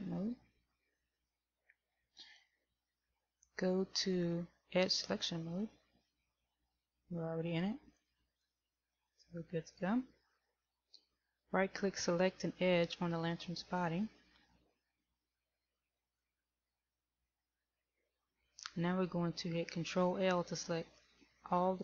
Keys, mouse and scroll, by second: 0.4 Tab, 8.1 click, 16.0 right click.